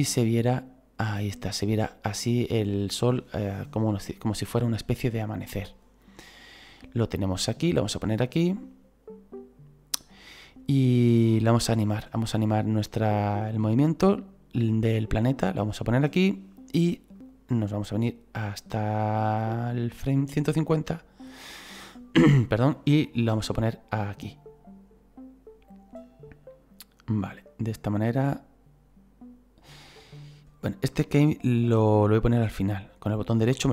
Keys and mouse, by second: 10.9 click, 12.5 click, 17.2 click, 22.7 click, 32.2 right click.